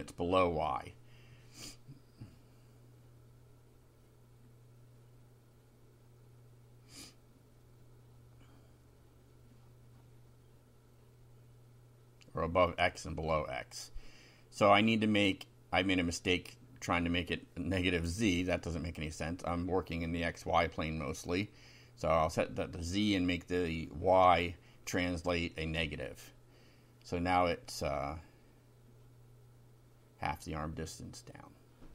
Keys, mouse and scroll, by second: 1.5 shift+Home, 2.2 shift+Home, 3.1 shift+End, 8.8 ctrl+c, 9.0 ctrl+End, 9.3 ctrl+Return, 9.8 ctrl+v, 10.7 Home, 11.8 Right, 14.0 Left, 14.8 Right, 15.1 BackSpace, 16.0 -, 16.3 2, 18.1 F5, 23.3 BackSpace, 25.5 0, 28.7 Left, 29.9 Right, 31.3 -, 31.7 F5.